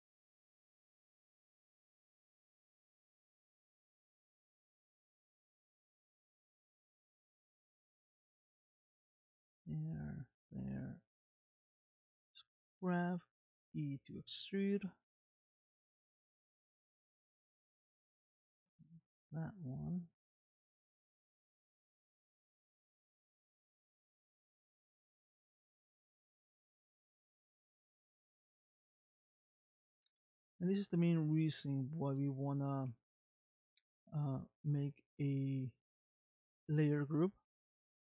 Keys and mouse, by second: 0.5 middle click, 1.2 e, 2.5-4.0 middle drag, 4.5 click, 5.6 middle click, 6.9-8.3 middle drag, 8.7 e, 9.5 e, 10.5 e, 11.6 middle click, 12.5 click, 13.3 middle click, 14.1 e, 14.9 e, 17.5 click, 19.0 g, 21.4 middle click, 22.4 click, 23.8-25.3 middle drag, 25.8 e, 26.8 e, 27.8 e, 29.1-30.5 middle drag, 30.9 click, 32.2 middle click, 33.7 middle click, 35.3 e, 36.2-38.1 middle drag.